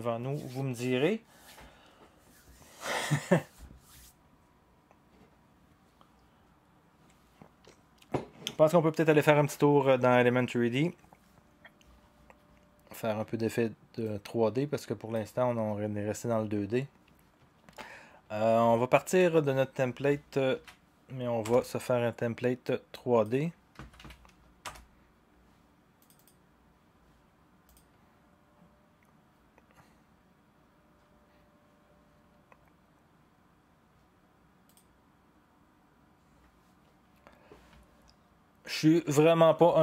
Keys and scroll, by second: 20.5 ctrl+d, 21.4 Return, 23.5-24.5 typing, 27.0-27.8 typing.